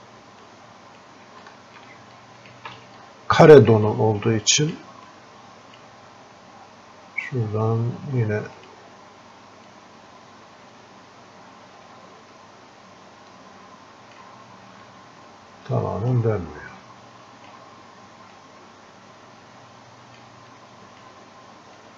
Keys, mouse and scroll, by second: 1.6 alt+click, 2.2 click, 3.1-15.2 alt+drag, 15.2-21.9 drag, 17.1 typing.